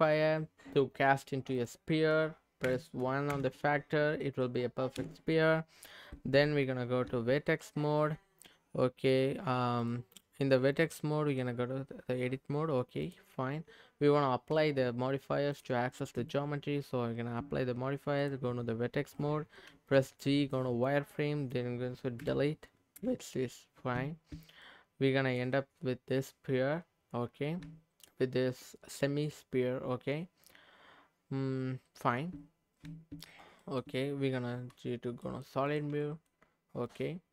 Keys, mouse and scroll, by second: 1.5-3.3 drag, 4.0 scroll up 1, 4.2 middle click, 4.9 KP_3, 6.2 Tab, 9.8-11.4 drag, 13.0 click, 14.5 Tab, 15.5 click, 16.2 Tab, 16.5 Tab, 18.2 click, 20.8 click, 20.8 z, 22.2 Delete, 23.6-23.9 scroll up 2, 23.9 Tab, 24.6 middle click, 25.9 scroll up 1, 26.0-26.8 scroll down 1, 27.6 Tab, 29.9 Tab, 33.6 middle click, 34.4 z, 35.2 middle click, 35.7 click, 36.0 middle click, 36.4-36.8 scroll down 2, 36.8 click, 37.2 scroll up 2.